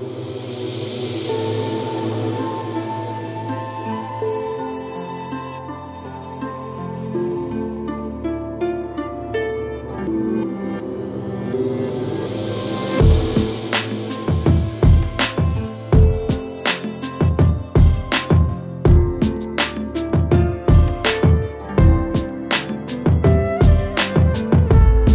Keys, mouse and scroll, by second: 0.1-1.5 drag, 1.5 middle click, 2.5-3.2 drag, 4.6 scroll down 1, 4.7 middle drag, 4.9-5.6 scroll up 6, 5.0 shift+middle click, 5.6-6.3 scroll down 7, 6.3-7.1 middle drag, 7.1 KP_1, 7.4 middle click, 7.8-8.5 drag, 8.7 middle click, 9.2 ctrl+s, 9.7 click, 9.8-10.1 scroll down 1, 10.3-10.8 middle drag, 10.8 click, 11.3 Delete, 11.5 click.